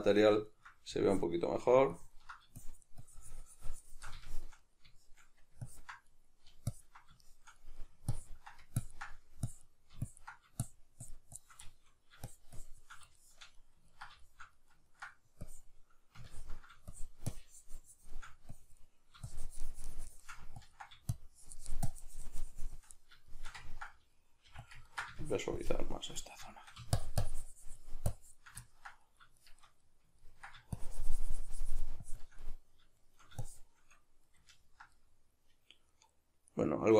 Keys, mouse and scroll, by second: 1.1-4.3 drag, 4.3-5.7 shift+middle drag, 5.7 ctrl+click, 6.1 middle click, 6.7 ctrl+click, 7.2 shift+middle click, 8.1-11.7 ctrl+drag, 11.7 shift+middle click, 12.3 shift+click, 13.2-15.5 shift+middle drag, 15.5-22.9 drag, 22.9-24.7 middle drag, 24.4 f, 24.8 ctrl+middle click, 25.2-26.2 shift+drag, 26.2 middle click, 26.9-28.6 shift+drag, 28.6-30.7 ctrl+middle drag, 30.7-32.4 shift+drag, 32.4-33.4 middle drag, 33.4 shift+click, 34.3-36.9 ctrl+middle drag.